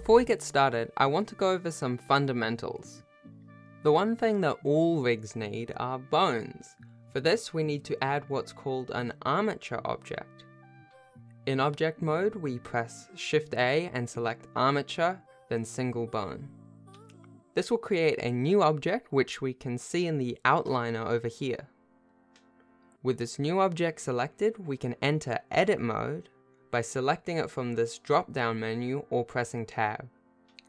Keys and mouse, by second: 0.0 r, 0.1 s, 1.1 shift+click, 1.3-3.5 typing, 4.1 alt+p, 5.4 click, 7.1 n, 9.4 shift+a, 11.0-11.8 shift+drag, 12.3 shift+a, 16.8-17.7 shift+middle drag, 18.9-25.0 shift+middle drag, 26.4 n, 28.3-30.1 drag.